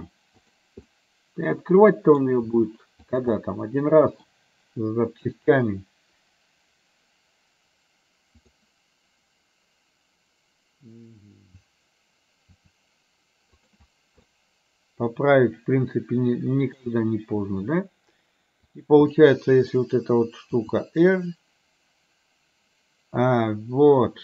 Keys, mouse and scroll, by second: 0.8-2.2 middle drag, 2.6 r, 3.5 middle click, 8.5 click, 12.6 r, 14.2-16.8 middle drag, 18.7 click, 19.2 middle click, 20.7 r.